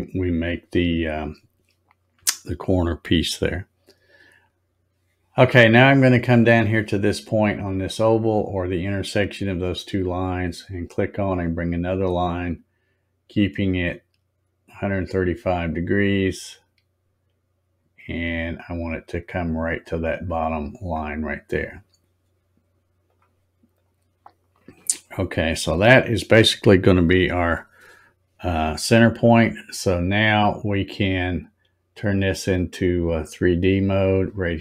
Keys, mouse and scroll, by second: 10.7 click, 20.6 click, 23.1 click, 23.7 click, 33.0 click.